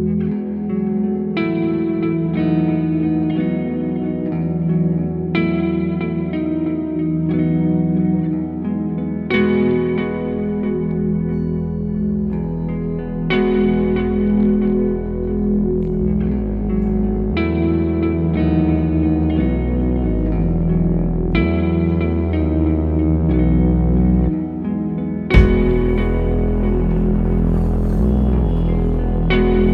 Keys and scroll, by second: 12.7 f.